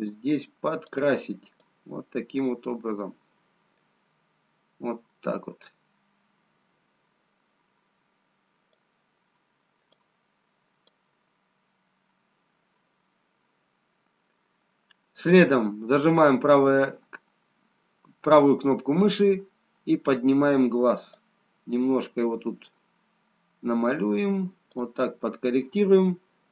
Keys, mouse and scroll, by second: 3.9 click, 11.8 click, 16.3 right click.